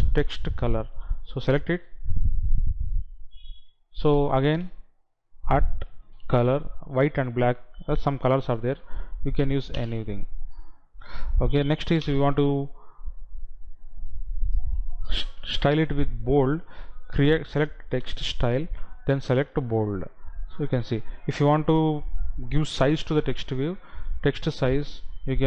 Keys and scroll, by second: 8.2 Down, 9.7 Up, 11.8 Right, 16.9 Down, 21.3 Right.